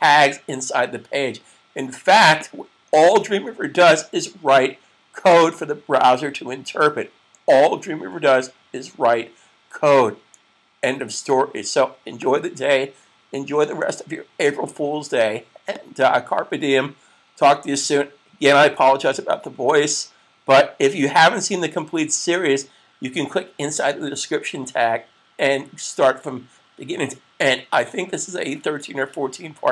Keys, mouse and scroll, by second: 2.4 click, 12.1 click, 15.7 click.